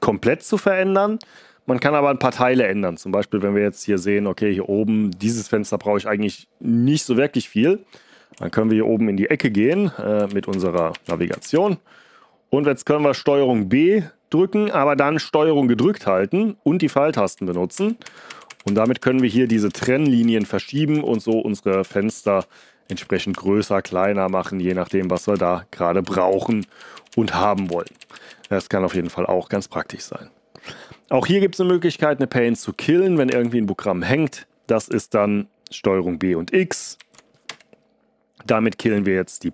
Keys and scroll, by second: 9.4 ctrl+b, 9.6 Up, 10.2 ctrl+b, 10.4 Up, 10.8 ctrl+b, 11.0 Up, 11.3 ctrl+b, 11.5 Right, 17.3 ctrl+b, 17.7 ctrl+Right, 18.0 ctrl+Right, 18.2 ctrl+Right, 18.4 ctrl+Right, 18.6 ctrl+Right, 18.8 ctrl+Right, 19.1 ctrl+Right, 19.3 ctrl+Right, 19.5 ctrl+Right, 19.8 ctrl+Right, 21.1 ctrl+Right, 21.6 ctrl+b, 22.0 s, 22.8 ctrl+Down, 23.3 ctrl+Down, 23.8 ctrl+b, 24.3 Down, 24.8 ctrl+b, 25.1 Down, 26.7 ctrl+Left, 26.9 ctrl+Left, 33.0 ctrl+b, 33.2 Right, 36.9 ctrl+b, 37.4 x.